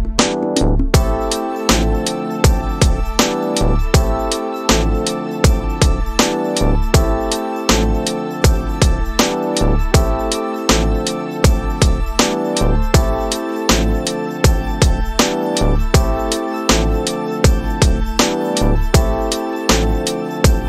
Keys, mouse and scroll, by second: 19.6-20.6 drag.